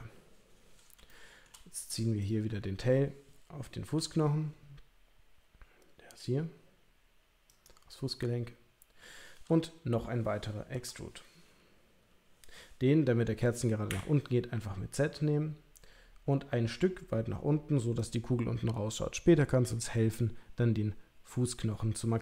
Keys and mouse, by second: 1.1 shift+middle click, 3.9 g, 10.7 e.